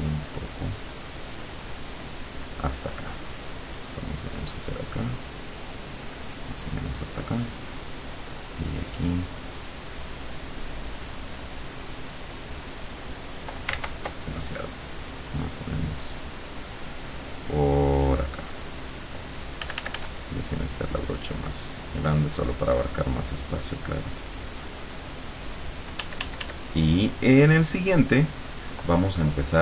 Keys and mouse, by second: 1.4 click, 2.0 click, 3.7-5.1 drag, 5.3-6.6 drag, 8.1-10.0 drag, 10.6-11.7 drag, 12.2-13.4 drag, 13.8 ctrl+z, 14.3 ctrl+click, 15.6-18.9 ctrl+drag, 19.6 f, 20.2-25.9 drag, 26.0 d, 26.7-27.9 drag, 28.1 click.